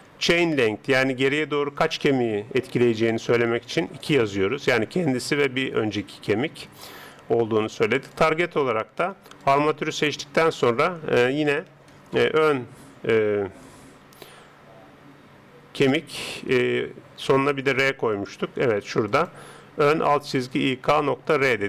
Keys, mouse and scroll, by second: 10.6 click.